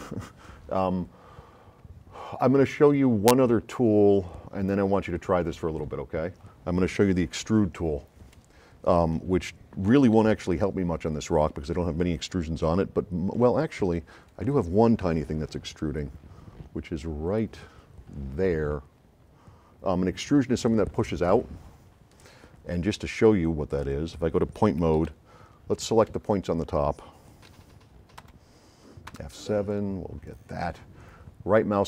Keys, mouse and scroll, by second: 10.2 s, 10.3-11.2 right drag, 13.5-14.6 right drag, 23.8 click, 25.0 s, 25.0-26.2 right drag, 28.2 F9, 29.2 F7, 29.7-30.4 drag.